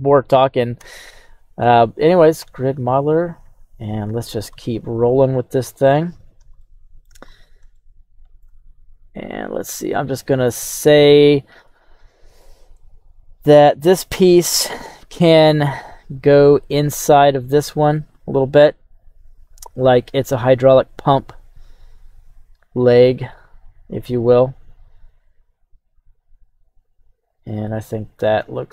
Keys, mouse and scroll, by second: 0.1 right click, 0.8 Tab, 1.6 right click, 2.3 q, 6.5-28.7 shift+middle drag, 7.3 scroll, 11.0 scroll.